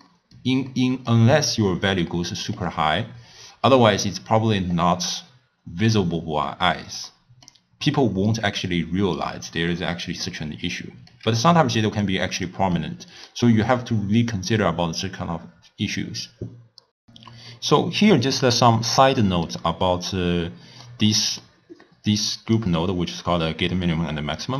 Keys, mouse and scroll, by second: 1.9-5.0 drag, 6.5-7.9 middle drag, 7.9-9.8 drag, 9.8-12.1 middle drag, 12.1 click, 12.8-16.7 middle drag, 18.5-22.1 middle drag, 22.1 click, 24.4 click.